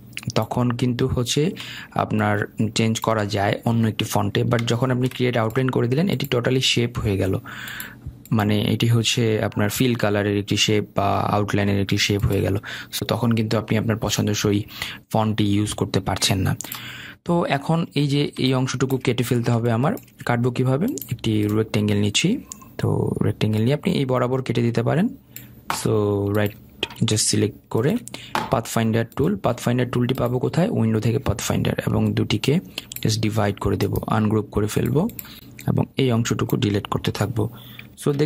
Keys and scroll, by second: 37.8 Delete.